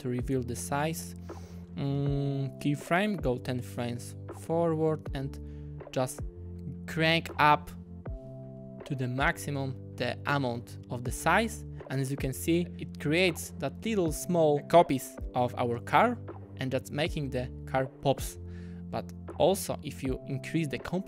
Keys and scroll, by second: 2.8 shift+w.